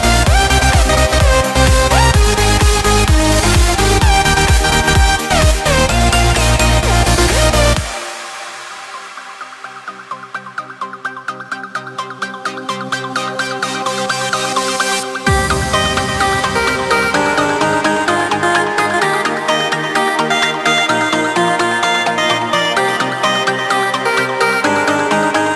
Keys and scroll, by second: 19.8 ctrl+space, 23.8 ctrl+space.